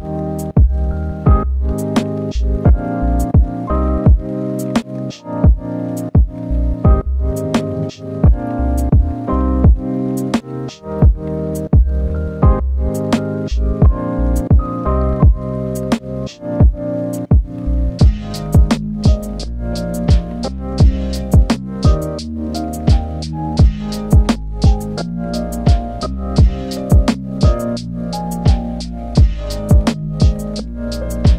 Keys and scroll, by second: 11.1 ctrl+z, 11.5 ctrl+z, 11.8 ctrl+z, 12.4 ctrl+z, 27.5 ctrl+z, 27.7 ctrl+z, 28.5 ctrl+z.